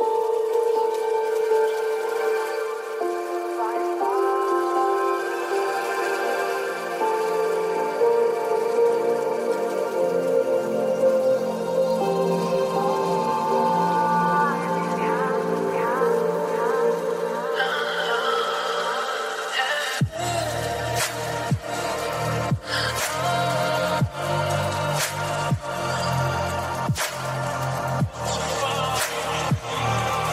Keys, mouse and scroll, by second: 0.4 g, 3.3 click, 4.2 click, 5.5 g, 7.3 click, 8.3 click, 9.9 g, 12.0 click, 12.6 click, 13.8 g, 17.6 click, 18.3 click, 19.4 g, 20.7 click, 22.2-24.7 drag, 25.7 click, 26.4-27.9 drag, 28.7-30.3 drag.